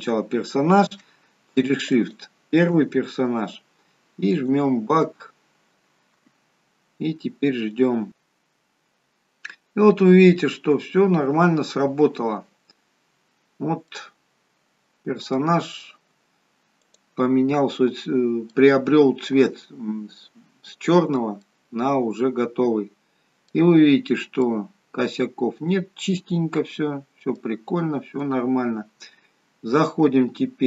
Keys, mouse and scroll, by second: 1.9 shift+click, 4.4 click, 12.8-13.8 scroll up 4, 13.8 middle click, 15.4-16.0 scroll down 2, 16.0-16.7 scroll down 1, 16.7 click, 18.4 middle click, 21.3 middle click, 23.7-24.4 scroll up 3, 24.4 middle click, 24.4-25.3 scroll up 1, 27.6-29.6 scroll down 3, 29.6-30.6 scroll down 1.